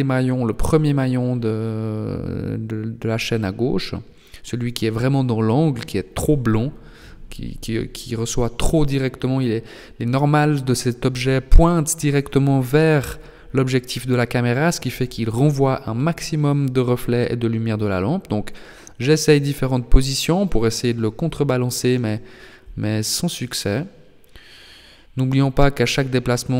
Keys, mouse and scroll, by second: 1.2 r, 3.9 g, 7.7 g, 13.4 r, 18.3 g, 19.8 r, 21.3 g, 22.2 r, 22.2 g, 26.1 shift+d.